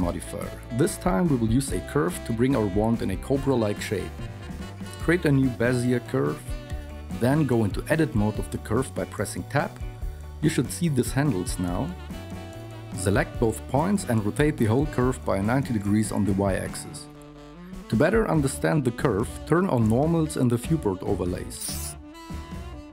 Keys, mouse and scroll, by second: 1.4 shift+a, 9.2 Tab, 10.4 a, 13.6 r, 17.0 a.